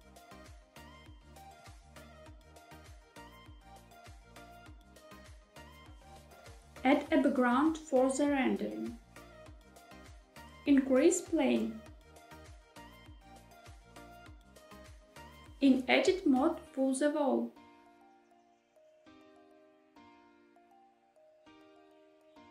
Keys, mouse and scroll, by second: 0.6 shift+middle click, 0.9 scroll up 2, 0.9 shift+middle click, 1.1 middle click, 1.6-1.9 scroll down 3, 1.7 middle click, 2.2 s, 2.8 click, 2.8 middle click, 3.7 scroll up 1, 3.8 middle click, 5.6 Tab, 6.1-6.8 scroll down 1, 7.7 shift+a, 11.6 s, 14.7 click, 15.6 Tab, 17.1 shift+middle click, 17.2 click, 18.9 e, 19.9 z.